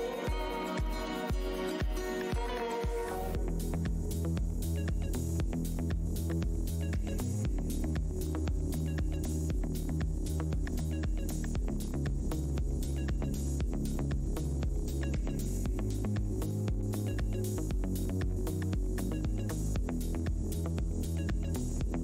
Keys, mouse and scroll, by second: 1.6 Tab, 2.5 alt+shift+w, 3.1 alt+Tab, 3.6 click, 4.0 alt+Tab, 4.3 alt+click, 4.8 alt+Tab, 5.0 click, 5.7 alt+Tab, 5.8 alt+click, 6.4 alt+Tab, 7.0 click, 7.7 click, 7.9 alt+Tab, 8.0 alt+scroll up 1, 9.1 alt+Tab, 9.7 scroll down 1, 10.6 alt+click, 11.6-12.0 alt+scroll up 1, 13.1 Tab, 13.3 click, 14.8-15.4 scroll down 1, 15.4 Tab, 16.2-16.9 scroll up 1, 16.9 Tab.